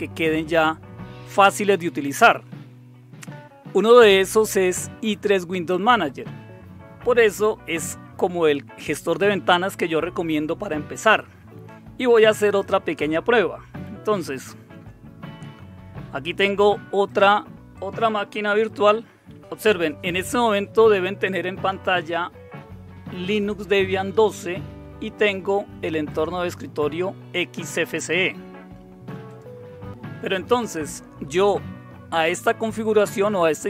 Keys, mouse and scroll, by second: 17.0 click, 17.4 typing, 26.1 click, 29.2 click.